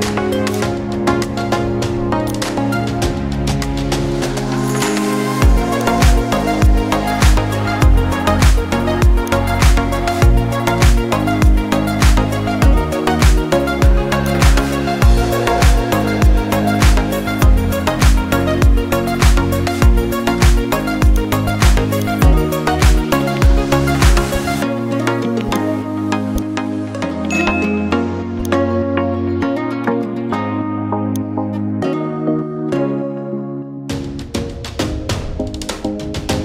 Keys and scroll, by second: 32.8 ctrl+alt+z.